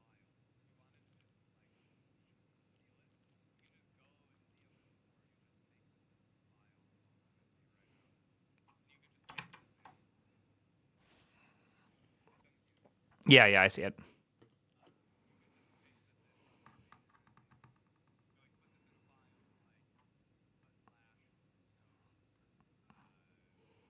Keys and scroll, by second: 9.3 alt++.